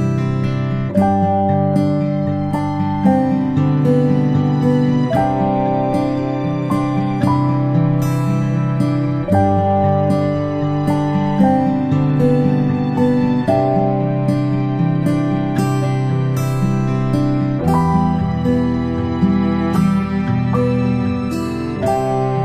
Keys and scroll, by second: 0.0 ctrl+space, 0.2 a, 6.8 a.